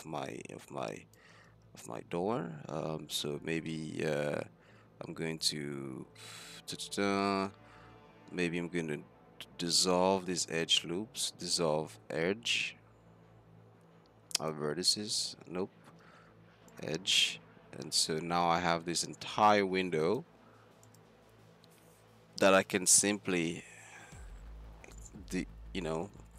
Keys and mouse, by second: 1.5 ctrl+z, 3.9-4.9 middle drag, 5.0-6.7 middle drag, 7.1 middle click, 7.7-11.6 drag, 8.4 x, 11.7 click, 15.5 ctrl+z, 15.7-18.3 middle drag, 15.7 x, 18.5-22.3 drag, 20.9-23.3 right drag, 23.3 middle click, 23.7 click, 24.5-26.3 middle drag, 24.5 x.